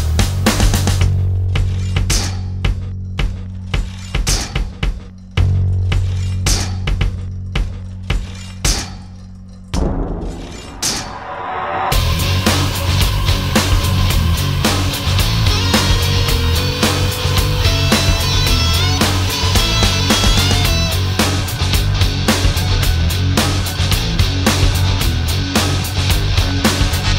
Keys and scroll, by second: 13.1 alt+space.